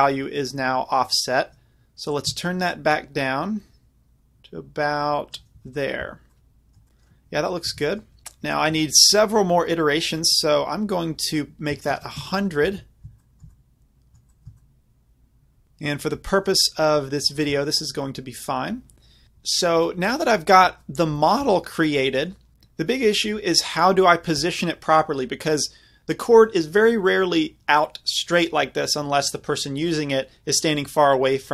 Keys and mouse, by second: 2.8-5.6 middle drag, 5.6 z, 6.0 z, 6.3-7.1 middle drag, 7.4 middle drag, 7.7 z, 10.2-12.0 middle drag, 12.0 KP_0, 13.4 middle click, 19.5-24.6 middle drag.